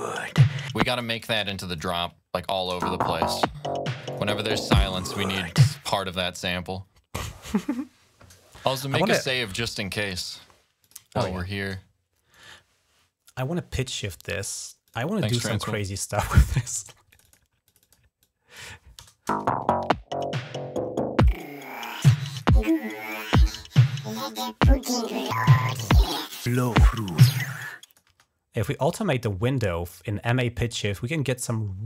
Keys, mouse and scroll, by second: 0.5 click, 0.8 space, 1.2 s, 1.5 click, 1.8 alt+1, 2.4 click, 2.5 space, 3.4-3.8 ctrl+scroll down 1, 3.9 click, 5.6 space, 5.8 right click, 10.6 click, 11.0 ctrl+s, 12.3 right click, 14.7 click, 16.5 click, 16.9 click, 17.5 click, 18.0 click, 18.4 2, 18.8 Return, 19.1 space, 20.0-21.1 drag, 21.8 click, 24.3 click, 25.1-27.8 drag, 27.9 space.